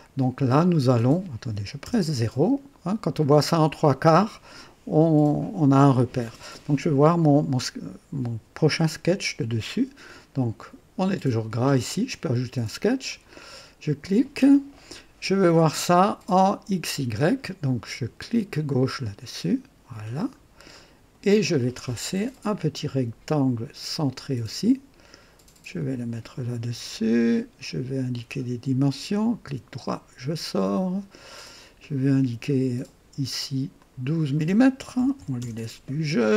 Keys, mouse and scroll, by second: 0.6 click, 1.8 KP_0, 1.8 KP_0, 2.6-3.1 scroll down 2, 3.2 right click, 13.0 click, 15.6 scroll down 2, 18.6 click, 20.0-20.3 scroll up 2, 20.7-21.3 right drag, 20.7 middle click, 23.9 click, 25.7 click, 28.1 click, 29.4 right click, 31.2 click, 33.7 click, 34.9 KP_1, 35.1 KP_2, 35.3 KP_Enter.